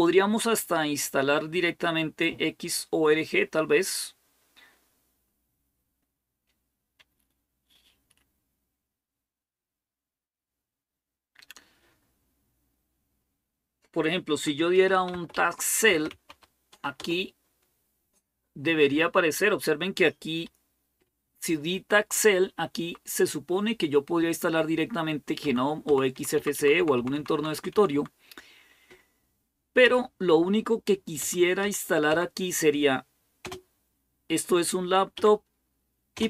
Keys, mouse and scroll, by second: 14.3-16.6 typing, 16.8 Return, 22.5 Down, 25.2 Down, 25.7 Down, 25.9 Down, 26.2 Down, 26.6 Down, 26.8 Down, 27.1 Down, 27.3 Down, 27.5 Down, 27.7 Down, 29.6 Up, 31.0 Down, 31.4 Up, 31.9 Down, 33.2 space, 34.9 Up, 35.9 space.